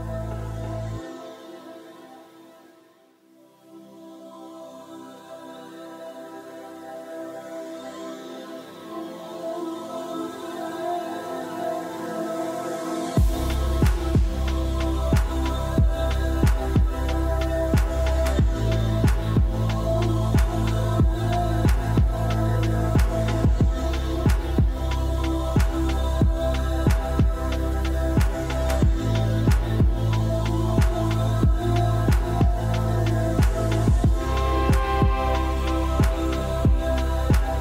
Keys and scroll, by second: 2.1 ctrl+s.